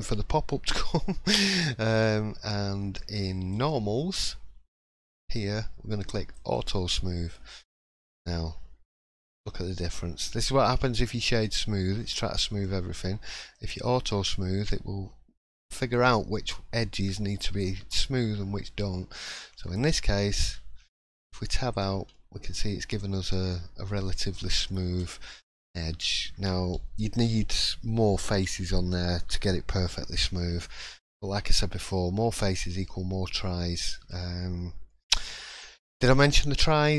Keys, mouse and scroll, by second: 3.5 click, 6.3 click, 9.9 click, 9.9-10.3 scroll up 2, 10.3 shift+middle click, 13.4 click, 21.2 Tab, 21.7 click, 22.1 middle click, 23.8 middle click, 24.8 Tab, 25.3 middle click, 29.2-29.7 scroll down 2, 31.1 click, 32.2-32.5 scroll down 2, 33.3 scroll up 2, 33.8 shift+middle click, 34.2-34.8 scroll down 1, 34.9 shift+middle click, 35.5-35.8 scroll up 1, 35.8 middle click, 36.2 scroll down 2, 36.6 shift+middle click.